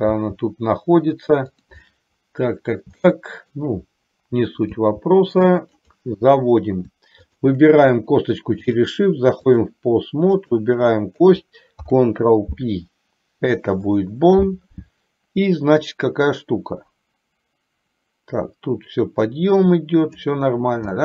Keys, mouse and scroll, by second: 0.2 g, 1.9 scroll up 1, 2.1 middle click, 3.2 shift+middle click, 4.8 g, 7.4 shift+click, 8.9-10.1 drag, 16.7-20.4 drag.